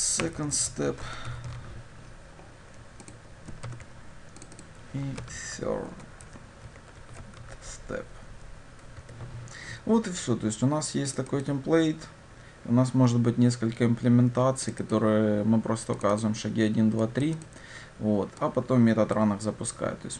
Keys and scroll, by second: 3.7 ctrl+v.